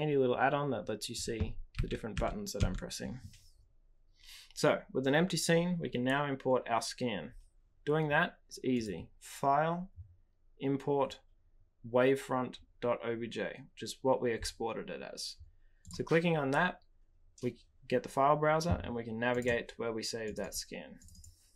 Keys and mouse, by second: 1.7 g, 2.1 h, 2.5 f, 8.8-16.0 drag.